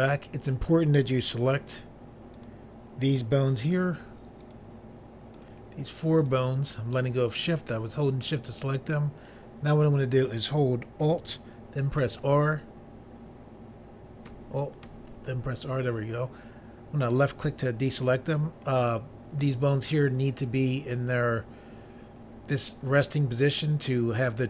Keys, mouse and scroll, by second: 2.3 click, 4.4 shift+click, 5.3 shift+click, 6.2 shift+click, 12.0 alt+r, 14.8 alt+r, 17.0 click, 17.1 click.